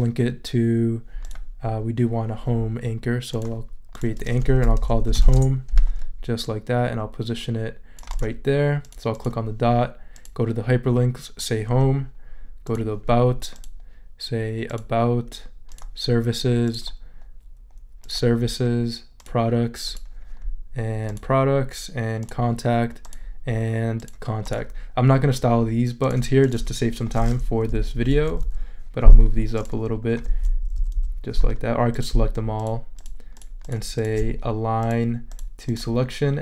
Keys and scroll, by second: 4.6-5.7 typing, 27.7 Down.